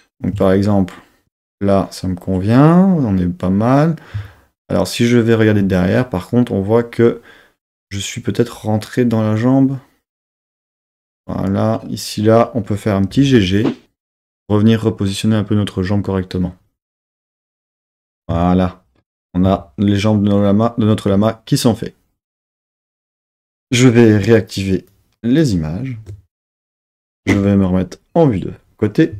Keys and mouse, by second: 11.2 click, 13.1 g, 13.3 g, 14.4 click, 24.9 click, 27.3 KP_3.